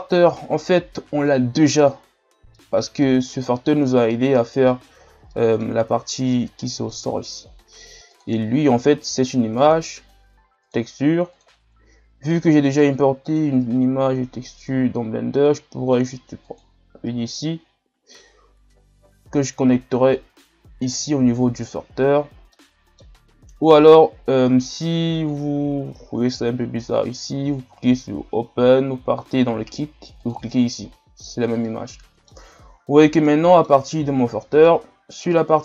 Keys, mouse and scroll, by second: 5.1 scroll up 1, 5.3-13.4 middle drag, 13.4-16.7 drag, 21.5-22.5 drag, 22.5-28.1 middle drag, 28.1-29.8 drag, 30.5-32.9 drag, 32.9-33.3 scroll down 2, 33.3-33.9 middle drag, 33.9-34.5 scroll up 1, 34.5 middle click, 35.0-35.3 scroll up 1, 35.3-35.6 middle drag.